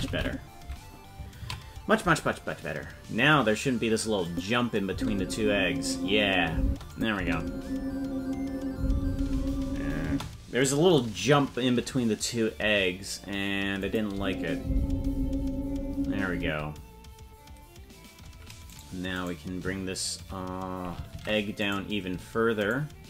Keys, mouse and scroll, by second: 0.0 Left, 0.1 Right, 0.2 Left, 3.5 ctrl+s, 4.2 click, 4.9 space, 6.6 space, 6.9 click, 7.1 space, 10.0 space, 13.8 click, 14.1 space, 16.4 space, 19.2 right click, 21.1 ctrl+Tab, 21.7 right click, 22.7 shift+right click, 22.8 shift+right click.